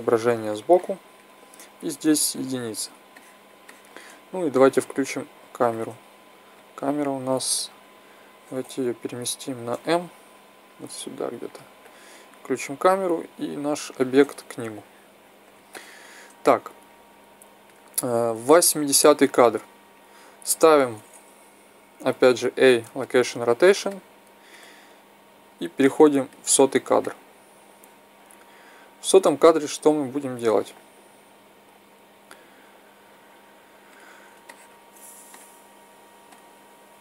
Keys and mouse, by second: 2.0 KP_1, 5.7-6.5 drag, 6.5-7.9 middle drag, 8.3-9.8 right drag, 9.1 m, 12.5-14.5 drag, 14.5 middle drag, 14.6-15.2 drag, 15.2-15.6 middle drag, 16.3-19.8 middle drag, 19.8-21.6 right drag, 22.1 i, 23.8-25.5 middle drag, 25.5-27.1 drag, 27.1 middle drag, 33.3-35.0 drag, 36.2-37.0 drag.